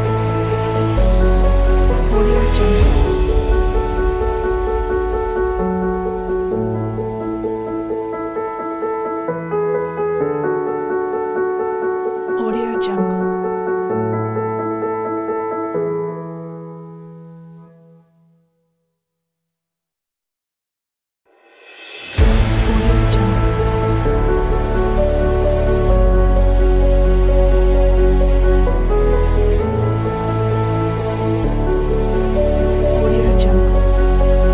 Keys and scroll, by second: 4.3 9, 6.2-7.2 typing, 13.1 9, 16.3 9, 16.7 Return, 18.8 BackSpace, 25.1 v.